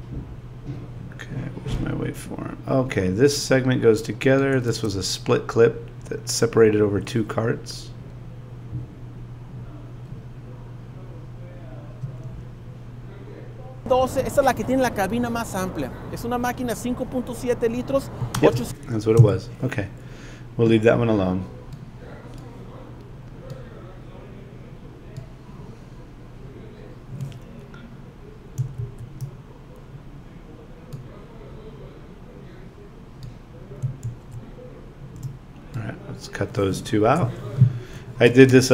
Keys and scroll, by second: 4.7 space, 18.3 space, 36.9 BackSpace, 38.3 space.